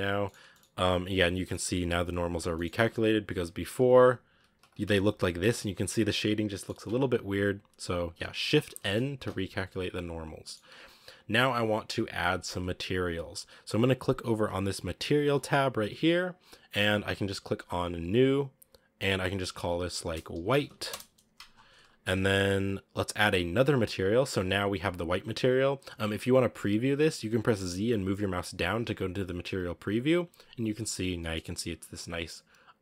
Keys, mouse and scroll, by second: 0.1-2.4 shift+middle drag, 2.4 scroll up 1, 2.4 middle click, 2.7 Tab, 3.7 ctrl+z, 3.9 ctrl+z, 4.2 ctrl+z, 4.7 Tab, 5.8 scroll down 2, 6.0-6.8 middle drag, 6.8 Tab, 7.0 a, 7.1 a, 8.7 shift+n, 9.1 Tab, 9.3 scroll up 1, 10.0-10.3 scroll up 1, 10.3 middle drag, 10.6-11.5 scroll up 1, 11.5-12.1 scroll up 1, 12.1 scroll down 2, 18.1-22.9 drag, 22.9 ctrl+s, 25.0-28.2 scroll down 1, 28.2 z, 28.8 z, 29.9 z, 31.1-32.8 middle drag.